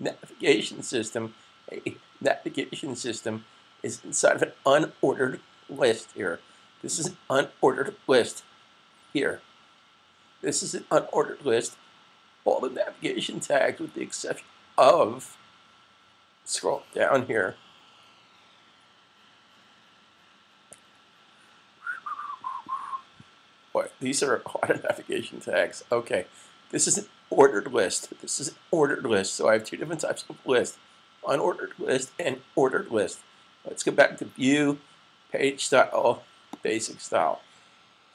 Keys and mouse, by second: 36.4 click.